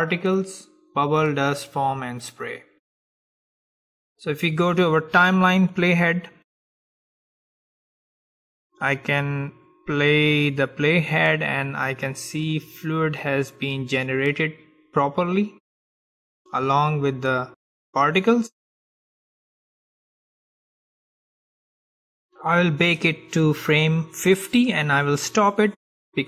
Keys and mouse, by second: 6.3-9.0 drag, 17.9-19.2 drag, 19.2 middle click, 20.5 click.